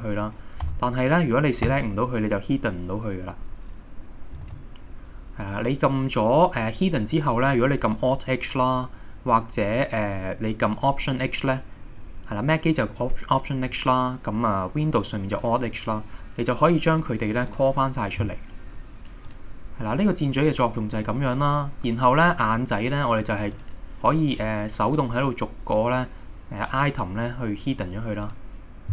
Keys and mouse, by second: 0.7 a, 1.7 h, 4.5 alt+h, 13.8-15.1 middle drag, 19.3 click, 22.9 click, 23.6 click, 24.3 click, 25.0 click, 27.8 click, 28.3 click.